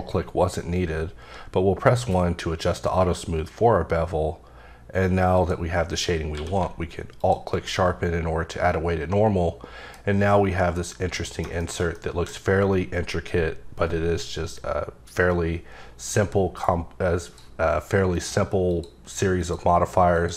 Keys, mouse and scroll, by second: 1.2 1, 5.3 click, 5.7 scroll down 3, 6.3 q, 7.2 alt+click, 7.7 middle click, 11.1 middle click, 11.6 middle click, 16.0 click, 17.3 click, 18.1 click, 18.7 click, 19.4 click, 20.1 click.